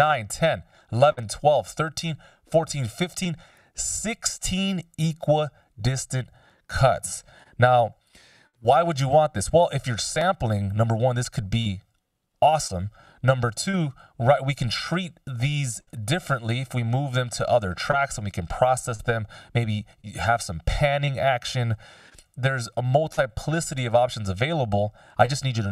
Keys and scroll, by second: 22.0 super+z, 23.2 super+z.